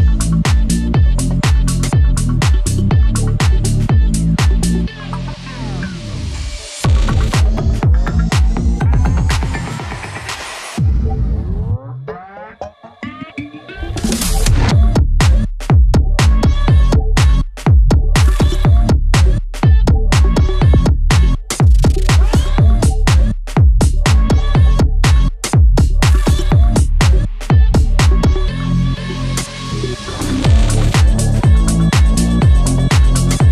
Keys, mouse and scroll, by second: 0.0-0.4 scroll up 1, 1.3 click, 4.0 ctrl+z, 4.5 click, 4.9 ctrl+z, 5.5 click, 5.7 scroll down 1, 6.0 scroll up 1, 6.5-7.8 drag, 8.8 ctrl+z, 9.6 ctrl+z, 10.0 click, 11.2 scroll down 1, 12.4 scroll up 1, 12.8-14.4 drag, 14.4 click, 15.2 ctrl+z, 15.8-18.3 drag, 18.6 scroll up 1, 20.1 scroll down 1, 21.8 scroll up 1, 22.6 scroll down 1, 23.8 scroll up 1, 26.4-27.2 scroll down 2, 26.7 click, 27.2 scroll up 1, 27.6-29.0 drag, 29.0-29.4 scroll down 1, 30.0-30.3 scroll up 1, 30.3 click, 30.9 scroll down 1, 31.2 scroll up 1, 31.5 ctrl+z, 32.0 click, 32.6 scroll down 1, 32.8 ctrl+z.